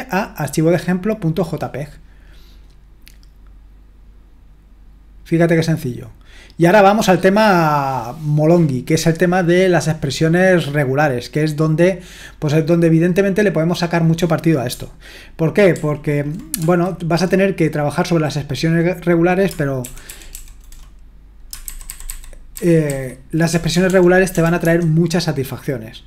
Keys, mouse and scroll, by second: 5.6-6.4 scroll down 1, 6.4-9.9 scroll down 1, 13.8 click, 15.7 ctrl+p, 19.8 alt+f, 20.1 alt+f, 20.3 alt+f, 21.7 alt+b, 21.9 alt+b, 22.1 alt+b, 22.5 alt+b, 22.9 alt+b, 23.5-24.6 typing.